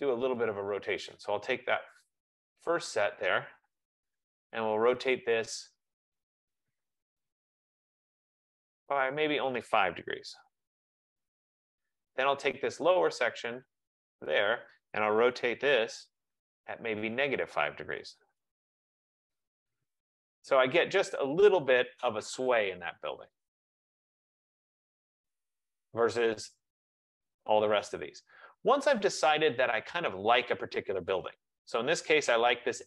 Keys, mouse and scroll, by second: 2.5 click, 3.6-4.9 typing, 6.4 click, 7.4-8.2 typing, 8.9 click, 10.3 typing, 10.9 Return, 14.0 click, 14.8-16.0 typing, 17.5 click, 17.9-18.6 typing, 19.7-20.4 typing, 20.1 click, 21.0 click, 23.3 click, 26.8 right click, 28.9 click, 29.2 F15, 29.8-30.6 scroll down 14, 30.6 right click, 30.6 scroll.